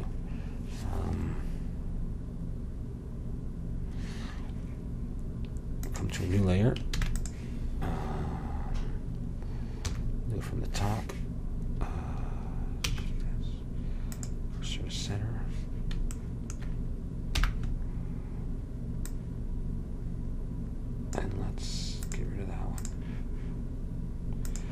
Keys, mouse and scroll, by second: 5.9-7.0 drag, 7.0 ctrl+s, 10.0 KP_7, 13.0 shift+s, 17.5 n, 19.2-21.1 drag, 22.1-24.7 drag.